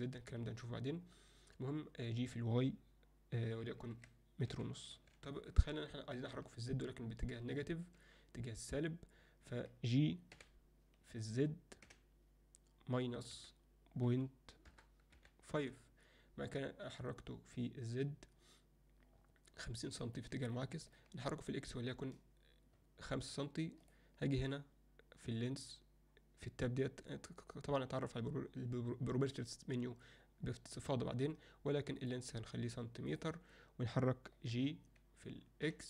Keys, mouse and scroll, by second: 5.8 alt+middle click, 7.6 middle click, 10.4 g, 20.5-21.0 alt+middle drag, 32.0-33.2 drag, 34.6 g.